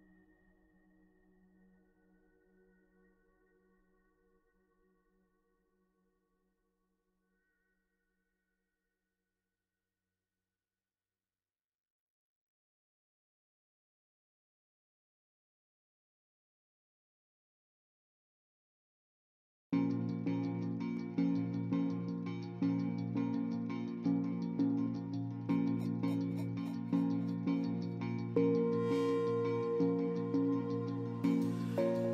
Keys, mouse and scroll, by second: 0.1 shift+s, 0.5 shift+s, 4.3 shift+s, 4.6 shift+s, 6.1 shift+s, 6.2 shift+s, 6.7 ctrl+z, 7.6-8.8 typing, 10.7 shift+s, 17.0 shift+s, 17.9 shift+s, 19.7 ctrl+z, 19.9 ctrl+z, 28.6 shift+s, 29.5 shift+s.